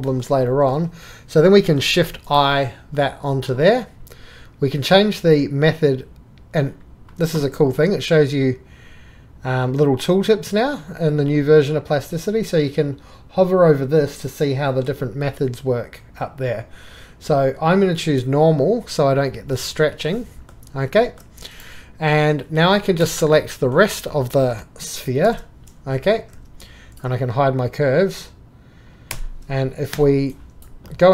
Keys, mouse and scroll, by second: 1.7-2.2 shift+middle drag, 2.5 click, 20.2-21.0 drag, 25.2 shift+x, 26.4 2, 29.1 h, 29.9 4.